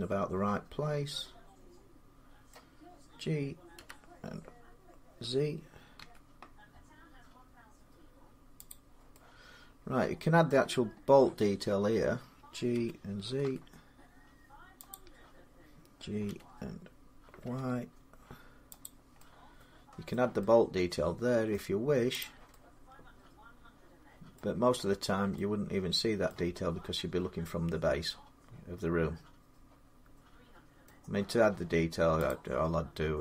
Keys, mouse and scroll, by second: 2.3 middle click, 3.6 g, 4.5-7.4 middle drag, 5.8 z, 8.5 click, 10.2-10.9 middle click, 10.6 scroll, 12.6-13.2 typing, 14.7 click, 14.7 g, 16.1 g, 17.2 y, 18.6 click, 19.9 middle click, 21.3 middle click, 22.0 click, 24.1 middle click, 24.3-24.9 scroll down 7, 26.1 middle click, 29.2 scroll, 30.6 middle click, 30.7 middle click, 32.1 click.